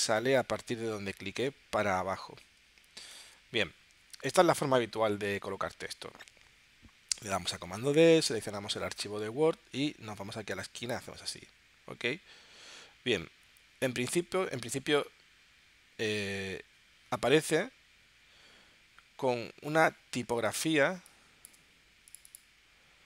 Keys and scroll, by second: 20.9 space.